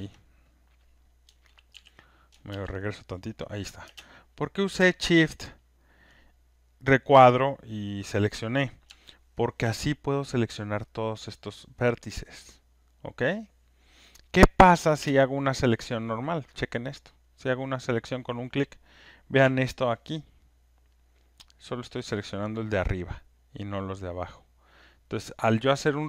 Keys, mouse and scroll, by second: 2.5 ctrl+z, 4.7 ctrl+z, 10.3 alt+click, 12.0 alt+click, 14.2 alt+click, 15.0 alt+click, 16.6 click, 17.4 click, 17.5 alt+click, 19.4 alt+space, 20.1 alt+click, 20.2 alt+click, 20.9 alt+right click, 21.9 alt+middle click, 25.4-25.9 alt+scroll, 25.9 alt+middle click.